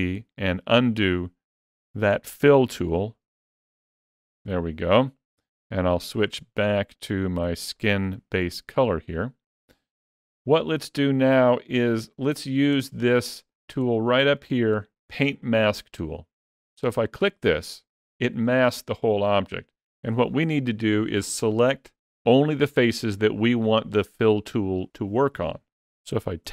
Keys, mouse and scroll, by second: 3.6 ctrl+z, 6.0 click, 8.3-9.9 scroll down 9, 9.5 middle click, 11.3-11.8 scroll down 2, 11.8 shift+middle click, 13.4 scroll down 2, 13.7 shift+middle click, 14.1-14.6 scroll up 1, 17.9 click.